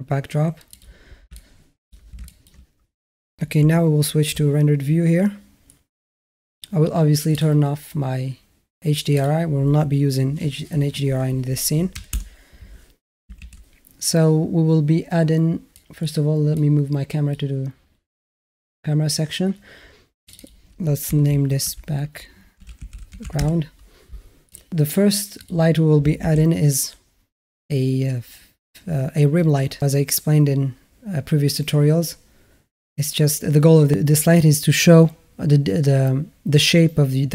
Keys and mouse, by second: 1.2-1.7 alt+middle drag, 2.0 shift+a, 2.1 shift+middle drag, 3.4 z, 9.1-12.0 drag, 13.2 shift+a, 15.6 click, 16.3 click, 20.1-23.2 drag, 25.3 click, 26.0 shift+a.